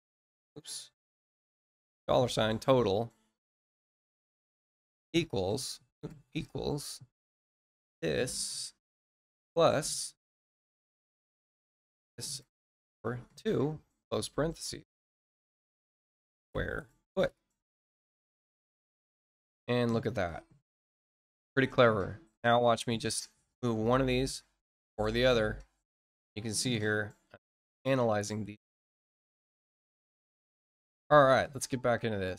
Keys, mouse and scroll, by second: 21.0 middle click, 22.6 click, 23.4 click, 24.8 click, 26.2 click, 28.8 middle click, 29.2 scroll down 1.